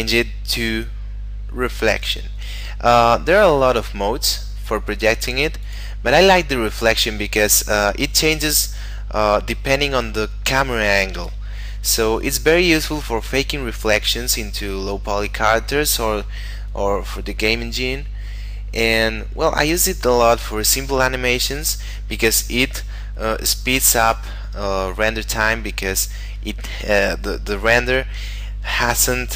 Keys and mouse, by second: 5.6 click.